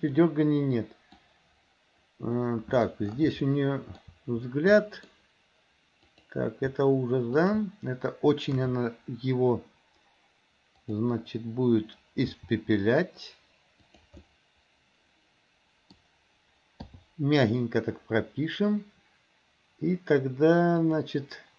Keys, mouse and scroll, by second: 0.2-1.2 middle drag, 2.4 middle click, 3.5-4.0 shift+middle drag, 4.8 middle click, 6.1 click, 7.4 shift+click, 8.6 KP_3, 10.9 click, 12.3 r, 14.2-16.0 middle drag, 20.8 click.